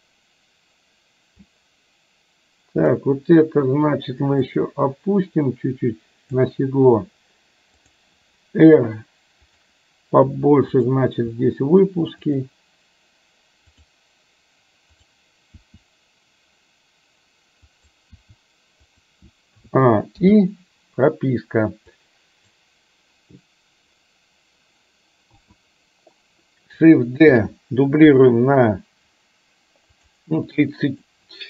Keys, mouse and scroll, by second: 4.7-6.6 drag, 7.8 click, 8.7 r, 10.8 click, 11.5 r, 13.8 click, 15.1 click, 15.6 r, 18.2 r, 19.7 a, 20.3 i, 22.1 click, 25.5 a, 27.5 shift+d, 30.6 click.